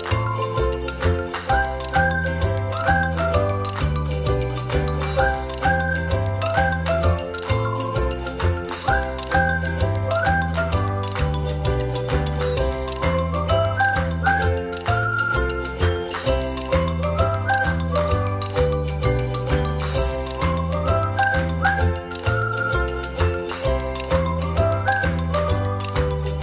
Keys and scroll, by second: 1.6 ctrl+z, 2.8 ctrl+z, 6.2 space, 9.7 space, 11.2 ctrl+z, 16.9 shift+space, 19.0 o, 21.6 ctrl+j, 21.8 space.